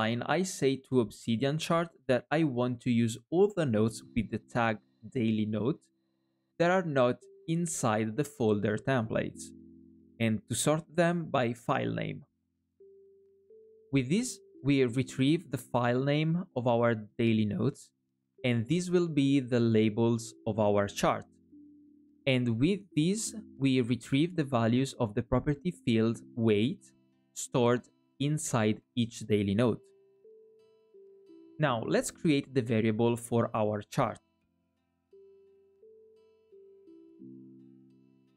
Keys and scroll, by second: 1.9 alt+à, 35.2 alt+shift+é, 36.6 alt+shift+é, 37.9 alt+è, 38.1 alt+shift+é.